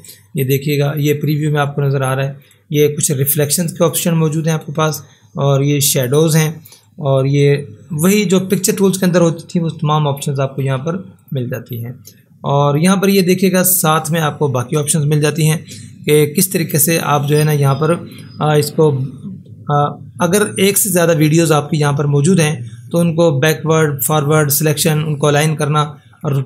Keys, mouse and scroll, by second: 11.2 click, 26.2 click.